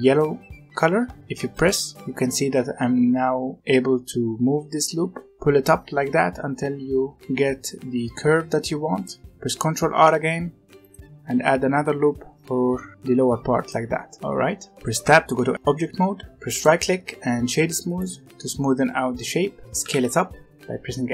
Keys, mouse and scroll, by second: 9.8 ctrl+r, 14.9 Tab, 16.4-19.4 right drag, 19.6 click, 19.7 s.